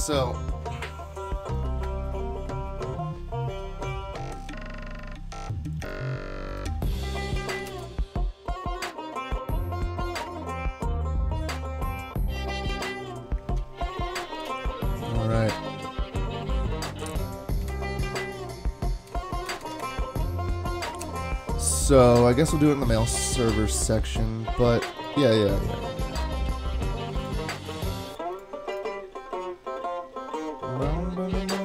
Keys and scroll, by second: 7.7 alt+super+Return, 12.8 alt+super++, 17.7 super+Tab, 19.6 super+Tab, 19.8 super+Tab.